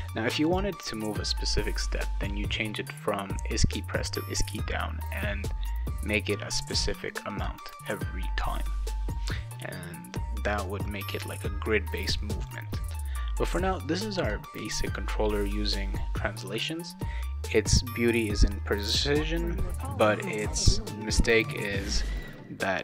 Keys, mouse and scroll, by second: 0.4 click, 1.9 click, 11.4-12.4 drag.